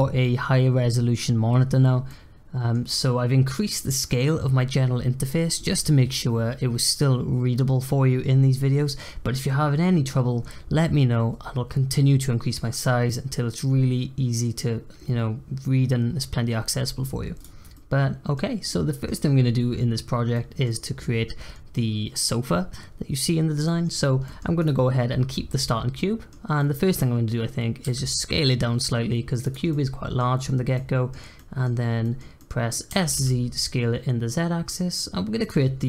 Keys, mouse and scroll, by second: 2.0-5.2 middle drag, 17.3 drag, 17.7-20.8 middle drag, 20.8-23.3 scroll up 2, 23.6 middle click, 24.0 scroll up 1, 24.2-24.5 middle drag, 24.5 click, 25.9-27.0 middle drag, 27.0-27.8 scroll down 1, 27.8 s, 29.7-30.4 middle drag, 30.4-30.7 scroll up 2, 30.7-32.9 middle drag, 32.9 s, 35.7-35.8 scroll down 3.